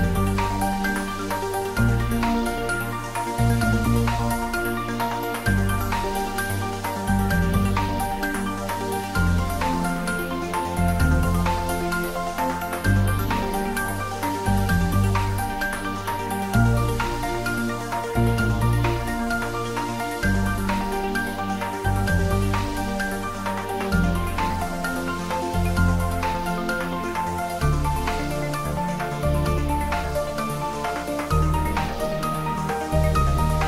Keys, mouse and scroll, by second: 0.5-3.2 drag, 4.3 click, 6.3-7.8 typing, 11.2-11.5 typing, 12.0 Return, 13.4-14.2 scroll down 1, 15.8 click, 17.3 click, 19.4 click, 23.7-24.7 scroll up 1, 24.7-26.1 drag, 26.3 scroll down 1, 26.6 scroll up 1.